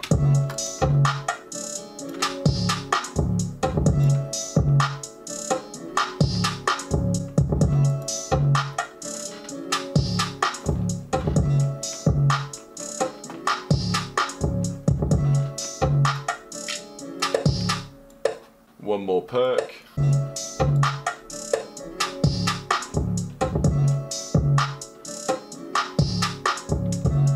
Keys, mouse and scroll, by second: 5.3 F1.